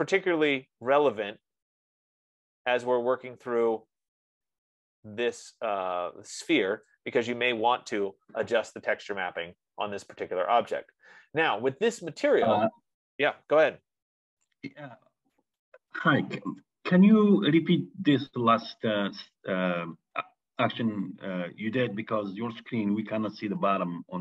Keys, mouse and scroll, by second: 4.8 F15, 7.2 click, 8.5-12.2 drag, 12.8-17.9 middle drag.